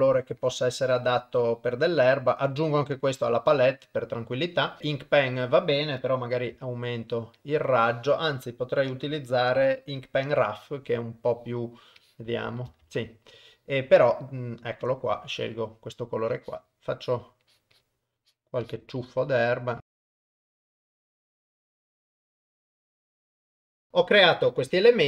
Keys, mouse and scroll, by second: 6.5 f, 8.4-12.6 drag, 12.8 ctrl+z, 14.0 click, 16.3-18.8 drag, 19.0-20.9 drag, 21.7 click, 23.3 click, 23.4-25.0 drag.